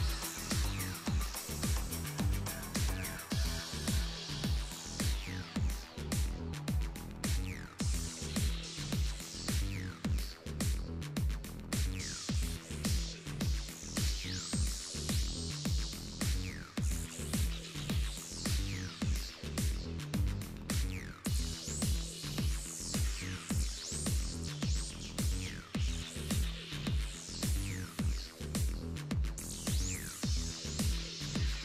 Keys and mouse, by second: 0.3 middle click, 0.8 click, 1.7-3.1 middle drag, 2.5 e, 5.7 Tab, 6.5-8.0 drag, 8.0 middle click, 9.1-10.2 right drag, 9.9 shift+s, 10.7 shift+a, 12.4 s, 13.3 z, 13.7-15.1 drag, 14.7 s, 17.0-21.0 drag, 20.1 z, 22.0-24.3 middle drag, 24.3 click, 24.6-25.1 middle drag, 24.6-25.1 right drag, 25.1 KP_7, 25.7-26.4 middle drag, 27.2 s, 28.6 Tab, 29.3 right click, 29.8-30.9 ctrl+drag, 30.9 o.